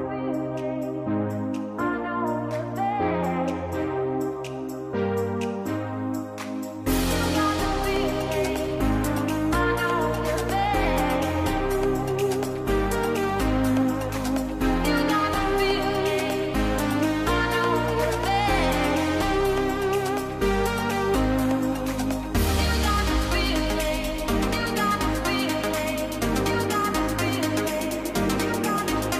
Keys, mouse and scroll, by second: 8.1 click, 10.2 click, 13.9-16.8 drag, 18.2-22.7 drag, 27.9-29.1 drag.